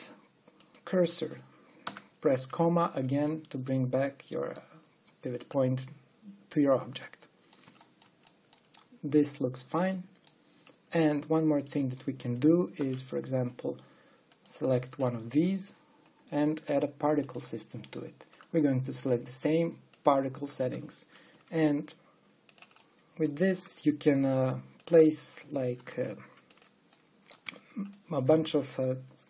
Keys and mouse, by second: 0.2 g, 2.5 ,, 8.0 middle click, 8.6 middle click, 9.1 middle click, 9.4 middle click, 10.1 middle click, 13.4 click, 13.4 shift+d, 22.0 g, 23.5 middle click, 24.3 g, 26.4 r.